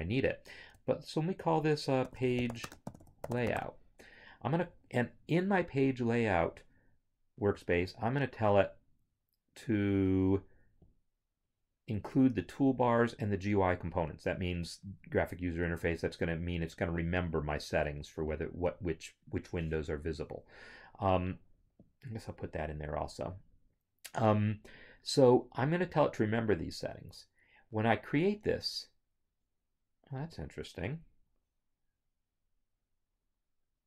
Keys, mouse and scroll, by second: 2.1-3.5 typing, 7.6 t, 10.8 click, 25.9 click, 31.5 scroll.